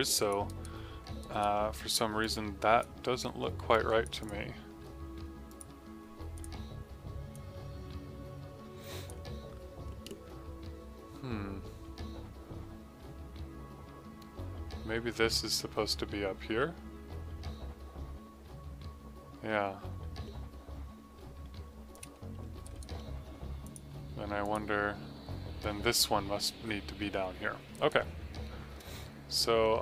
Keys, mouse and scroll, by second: 0.4 alt+right click, 1.1 right click, 1.5 middle click, 3.6 click, 5.1 typing, 21.8 click, 22.6 alt+right click, 22.9 alt+middle click, 23.6 click, 27.7 right click, 29.5 middle click.